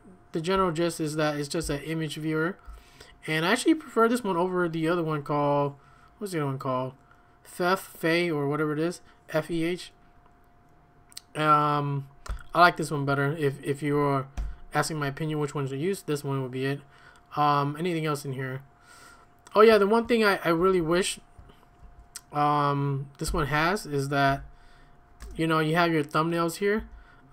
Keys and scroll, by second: 0.0-0.5 typing, 1.6-2.6 k, 12.3 q, 14.3 ctrl+l, 20.6 ctrl+a, 20.8 ctrl+a, 21.8 Tab, 23.3 l, 24.3 f, 25.2 Return, 26.5-27.3 typing.